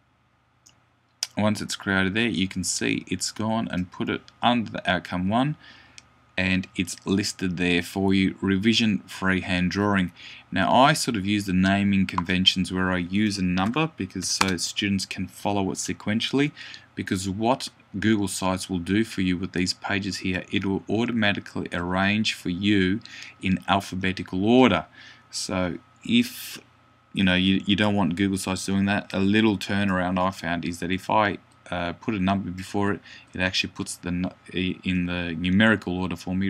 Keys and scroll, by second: 13.5 5, 14.0 ..